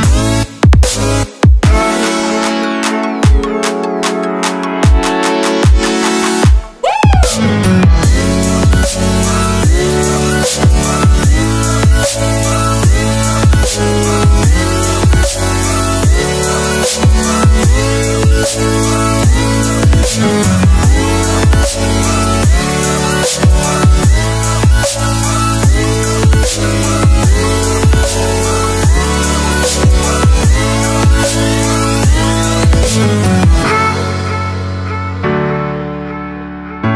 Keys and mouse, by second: 1.8-2.3 drag, 2.8-5.3 drag, 5.9-6.6 drag, 7.0 click, 8.6 click, 13.9 click, 15.2 click, 17.5 click, 18.8-20.1 drag, 22.3-22.7 drag, 22.7 middle click, 22.8 click, 25.8 click, 27.0 click, 28.2 click, 31.2 middle click, 32.2 middle click, 33.3 click.